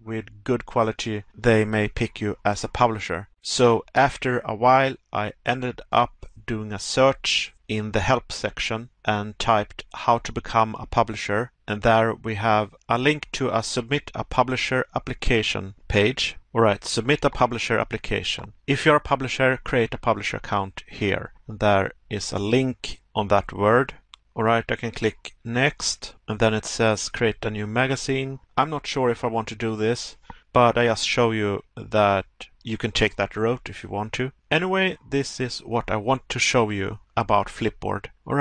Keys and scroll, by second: 1.3 Pause, 11.1 Pause, 24.5 Pause, 28.4 Pause, 34.1 Pause, 36.5 Pause.